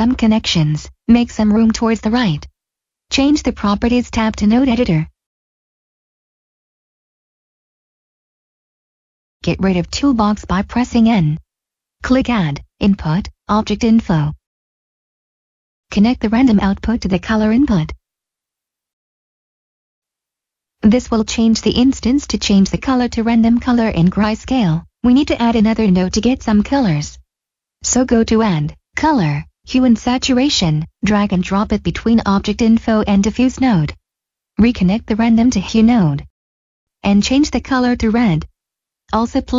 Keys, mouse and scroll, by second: 6.4 click, 11.0 n, 12.0 Delete, 12.1 click, 15.5 click, 21.6-23.6 scroll down 1, 23.6 scroll up 1, 24.1 scroll down 1, 27.4 scroll down 1, 27.9 click, 30.3 click, 37.1 click.